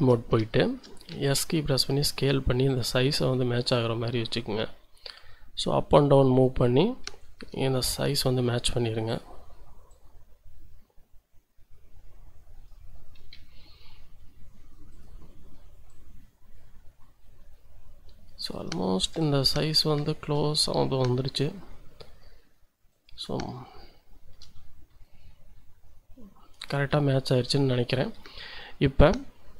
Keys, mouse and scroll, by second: 0.5 shift+click, 1.1 s, 2.7-6.6 drag, 7.4 s, 9.1 click, 9.9-12.8 drag, 13.3 s, 14.9-18.7 drag, 18.9 shift+middle click, 19.2-19.7 shift+scroll up 1, 21.0 s, 22.9 middle click, 23.6 shift+middle click, 25.0-26.7 shift+drag, 27.0 shift+click, 27.7 shift+middle click.